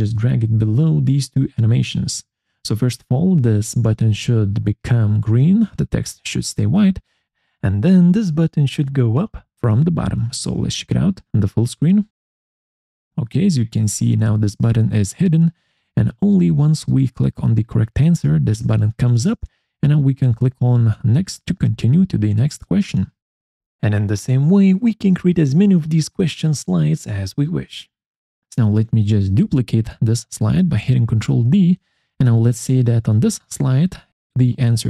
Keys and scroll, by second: 22.4 Escape.